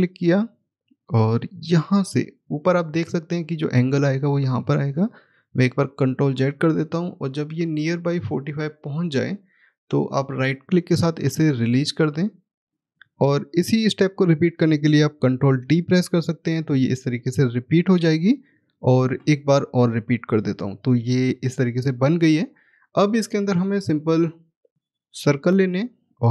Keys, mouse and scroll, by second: 4.6 ctrl+z, 6.2 click, 12.6 right click, 15.5 ctrl+d, 18.8 ctrl+d, 24.7 click.